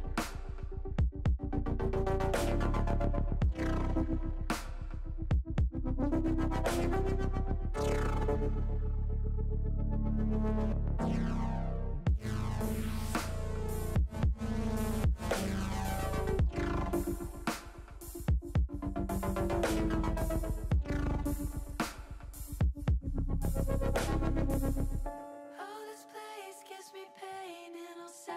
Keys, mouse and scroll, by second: 1.3 alt+shift+click, 2.4 click, 5.3 shift+middle click, 6.4 middle click, 8.7 s, 15.4 click, 16.0 ctrl+z, 17.0 click, 17.3 middle click, 18.4 middle click, 18.7 middle click, 19.3 shift+middle click, 20.3 shift+middle click, 21.7 middle click, 22.4 shift+middle click, 24.6 ctrl+z, 26.0 shift+click, 26.3 middle click, 27.5 shift+click.